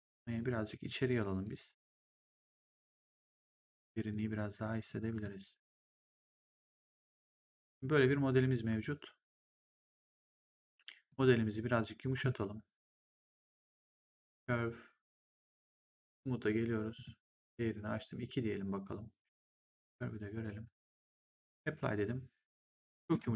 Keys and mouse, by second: 0.7 click, 1.9 click, 3.0 click, 5.1 click, 6.2 click, 8.0 right click, 9.7 click, 13.8 click, 16.9 click, 21.3 click.